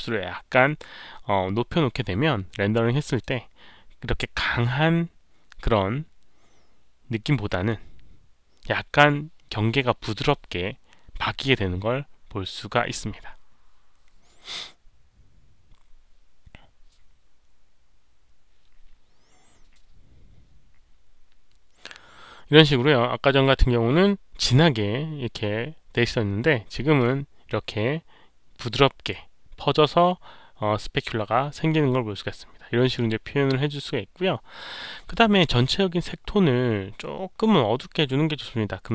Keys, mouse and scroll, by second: 3.0 click, 3.1 Return, 3.1 KP_5, 3.1 KP_Decimal, 5.9 click, 5.9-6.2 scroll down 1, 5.9 KP_5, 5.9 KP_Decimal, 6.3 middle click, 6.7 scroll up 1, 7.5 scroll up 1, 9.6 Return, 9.6 click, 12.2 middle click, 12.7 middle click, 26.9-32.9 drag.